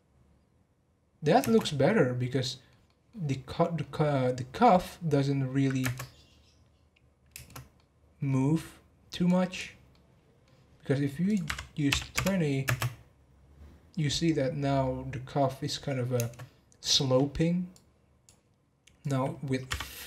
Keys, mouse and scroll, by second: 1.4 space, 1.6-3.9 middle drag, 3.9 scroll up 1, 4.2-5.8 middle drag, 5.8 space, 7.4 space, 7.7-8.4 middle drag, 8.4-9.3 scroll down 1, 9.3-9.9 drag, 9.9-11.2 middle drag, 11.2-12.6 drag, 12.6 space, 16.3 space, 17.7-20.0 drag.